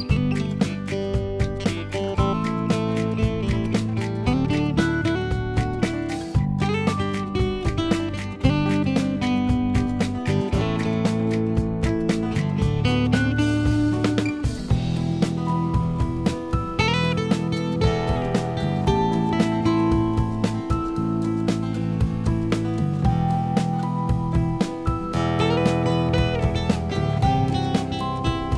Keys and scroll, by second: 17.3 ctrl+0.